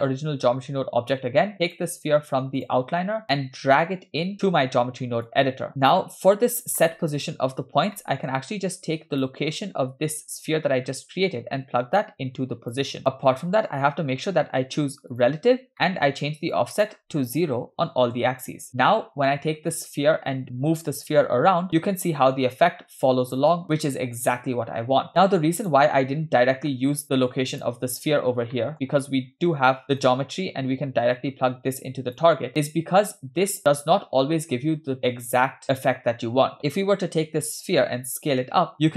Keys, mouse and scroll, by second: 1.6 click, 2.6 click, 3.4 click, 5.7-6.7 drag, 5.7 middle click, 5.7-6.7 scroll down 2, 6.8 middle click, 7.4-7.9 scroll up 1, 8.0 middle click, 8.8 click, 9.6 middle click, 10.9-11.8 scroll up 2, 12.1-12.9 drag, 13.3 middle click, 13.9-14.4 scroll up 2, 15.2 click, 15.7 middle click, 16.5-18.1 shift+drag, 19.7 click, 20.9 g, 27.5 click, 28.5 middle click, 28.9-30.0 scroll down 1, 30.0 scroll down 1, 30.1 click, 30.4-32.4 drag, 32.5-33.4 scroll down 5, 33.5-36.6 middle drag, 36.6 click, 37.7 s.